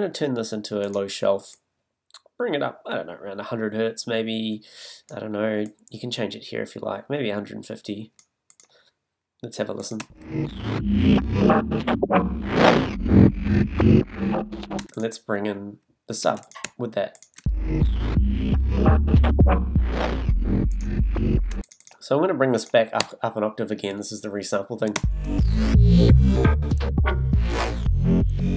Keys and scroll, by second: 10.0 space, 14.8 space, 18.4 super+space, 21.5 space, 25.9 space.